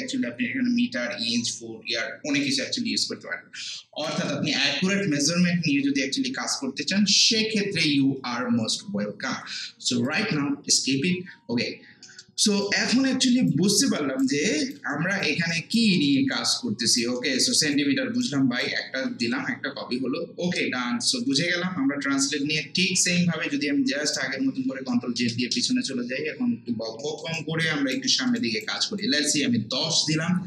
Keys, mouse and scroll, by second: 4.6 click, 10.1 click, 11.4 scroll down 1, 11.9 scroll up 1, 12.0 alt+middle click, 12.4 alt+right click, 12.9 alt+middle click, 13.2 alt+right click, 13.7 alt+middle click, 14.5 alt+click, 14.9 alt+right click, 16.0 alt+middle click, 16.3 alt+right click, 17.2 alt+middle click, 17.5-21.6 alt+right drag, 24.1 click, 24.9 ctrl+z, 26.4 scroll up 1, 27.0 alt+middle click, 27.4 alt+right click, 28.1 alt+middle click, 28.4 alt+right click, 28.8 alt+middle click.